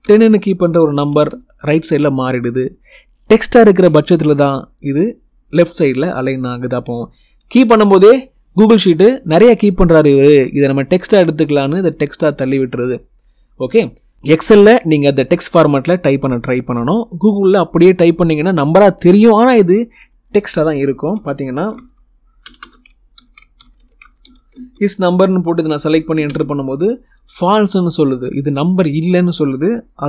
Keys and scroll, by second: 0.1 0, 0.9 Return, 21.0-24.1 typing, 24.4 Tab, 26.1 Return.